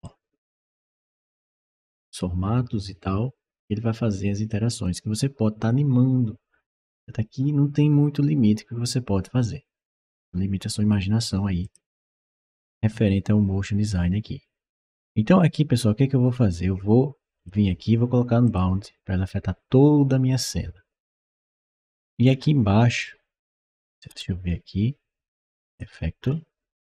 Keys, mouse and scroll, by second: 0.5 scroll down 1, 1.3-4.7 drag, 11.4 click, 17.2 click, 18.3 click, 21.4 scroll down 1, 22.1 scroll down 1, 22.8 scroll up 1, 23.6-24.4 scroll up 2, 23.9 middle click, 25.5 click.